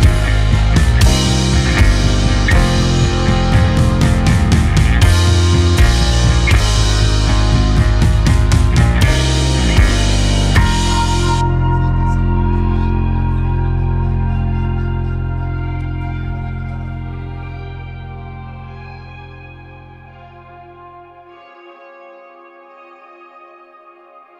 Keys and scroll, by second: 4.3 g, 12.8 g, 16.0 Escape, 17.8 g, 23.4 Escape, 24.0 x.